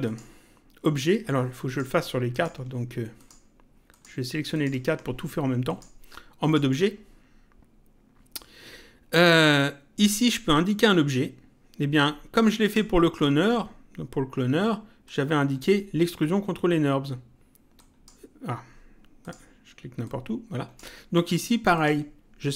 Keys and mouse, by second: 0.0 click, 1.6 click, 3.2 ctrl+click, 5.7 click, 12.6 click, 15.0 click, 17.8 click, 19.2 click, 21.7 click.